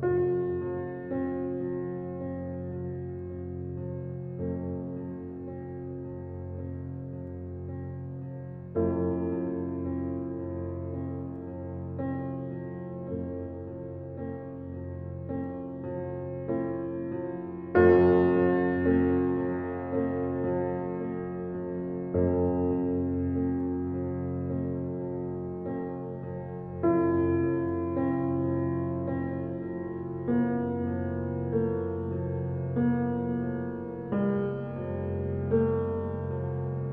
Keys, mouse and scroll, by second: 1.0 alt+right click, 1.5 alt+middle click, 2.3-5.9 alt+drag, 5.9 alt+right click, 6.4 alt+middle click, 6.7 alt+right click, 7.1 alt+click, 7.7 alt+middle click, 8.1 alt+click, 13.1 right click, 13.4 right click, 16.5 click, 18.9 ctrl+1, 19.7 click, 22.4-24.9 right drag, 24.9 click, 27.5 click, 28.3 alt+click, 28.8-31.1 right drag, 31.1 2, 33.0-33.7 typing, 34.0 click.